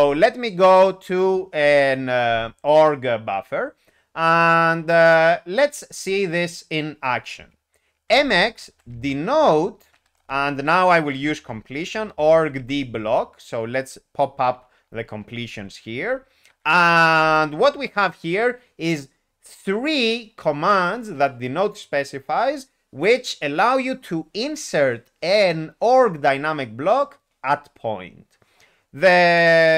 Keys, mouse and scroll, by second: 8.2 alt+x, 8.7-12.8 typing.